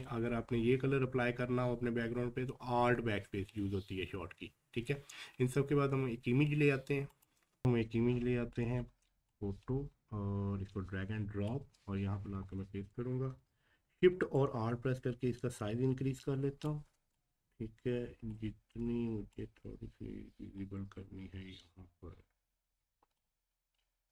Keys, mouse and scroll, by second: 4.3 click, 4.3 scroll up 1, 4.9 scroll down 1, 7.1 click, 9.3 Page_Up, 12.4-12.9 scroll down 1, 14.3-19.3 alt+shift+drag, 19.3-24.1 alt+shift+drag.